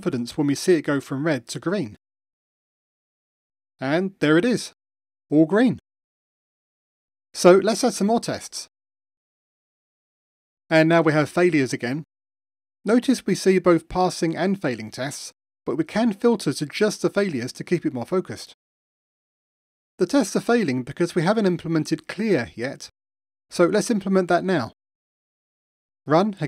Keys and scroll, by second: 4.5 super+4, 23.5 Return, 25.8 ctrl+r.